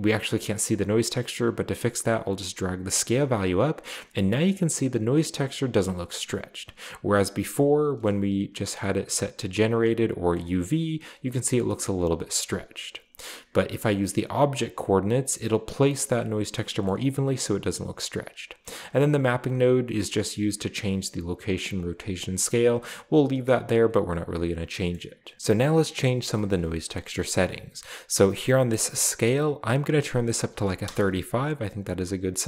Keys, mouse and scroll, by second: 2.0-4.0 drag, 4.2 scroll up 2, 8.6-9.4 drag, 10.0-10.6 drag, 12.1-12.8 drag, 14.2-15.3 drag, 16.9-17.6 middle drag, 19.1 click, 19.7-21.0 drag, 20.8 middle click, 20.8 right click, 22.1 click, 23.6 click, 24.9 middle click, 26.1-26.8 scroll up 1, 26.3 middle click, 29.7 click, 30.4 typing, 30.8 Return.